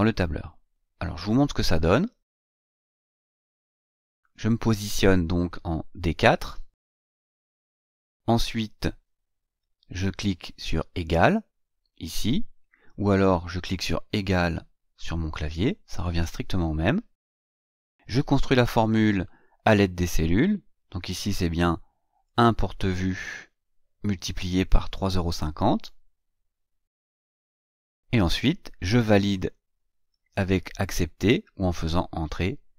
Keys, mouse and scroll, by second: 3.8 click, 6.5 click, 22.1 click, 24.7 click.